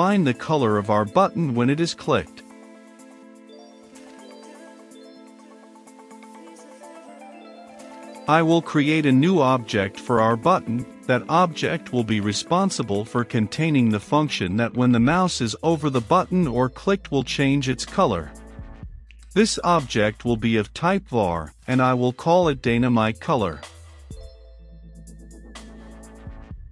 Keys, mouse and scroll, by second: 0.0-2.6 typing, 0.8 click, 3.3 click, 3.6 ctrl+v, 4.2 click, 4.7 shift+c, 5.5 Return, 5.7 c, 6.8 click, 12.1-17.7 typing, 13.8 Return, 14.1 Return, 16.3 Return, 17.1 Return, 18.4-22.6 drag, 22.6-25.0 typing, 22.8 Return, 26.0 click.